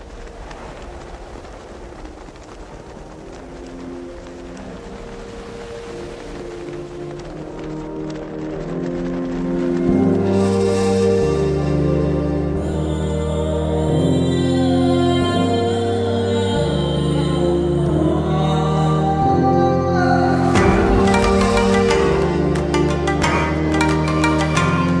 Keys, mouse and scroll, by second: 6.5 click, 9.4 right click, 10.6 click, 13.6 ctrl+t, 14.4-16.3 drag, 17.2 t, 18.4-20.6 shift+drag, 23.3-24.5 drag.